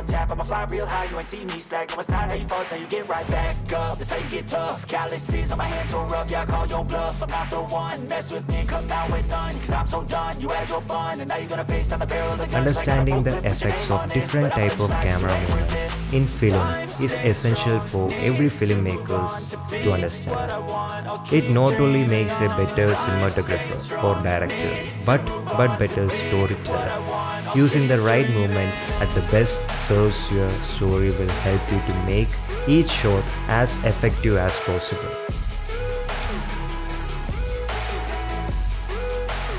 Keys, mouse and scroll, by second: 2.7-7.0 drag, 9.1 click, 10.8-11.1 shift+drag, 11.1 middle drag, 11.5-11.9 middle drag, 12.9-14.1 drag, 16.4-18.0 drag, 18.8 click, 20.1-20.9 drag, 21.4 click, 22.7 drag, 23.2 shift+drag, 23.6 drag, 24.9 ,, 25.4 ,, 26.1 click, 27.6-30.7 drag, 30.9 i, 31.4 space, 36.5 space, 36.9 space, 37.4 space, 38.2 space.